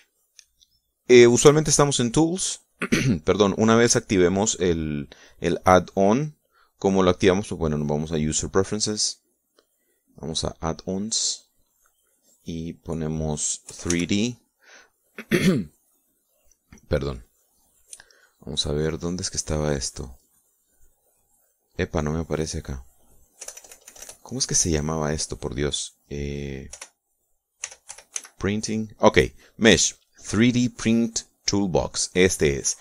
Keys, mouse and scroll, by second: 1.4 click, 9.1 click, 10.2 click, 11.7 click, 13.6 click, 14.9 3, 15.1 d, 24.6 BackSpace, 27.9 p, 28.8 r, 29.1 i, 29.3 n.